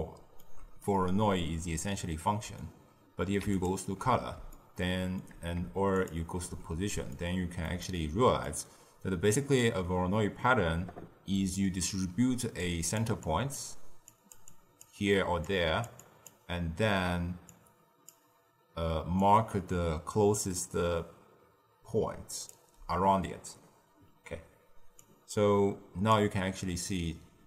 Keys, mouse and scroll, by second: 3.5-4.5 ctrl+shift+drag, 4.5-5.9 shift+middle drag, 5.9-7.1 ctrl+shift+drag, 7.1-12.5 ctrl+middle drag, 12.5 click, 12.9 d, 13.1-22.4 drag, 22.4 d, 24.9-26.1 drag.